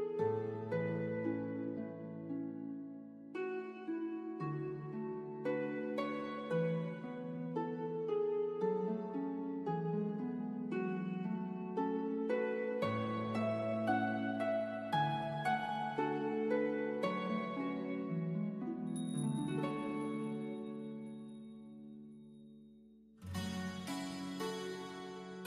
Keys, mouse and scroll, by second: 1.3 click, 4.9 right click, 7.2 click, 10.2 click, 15.2 click, 20.6 click.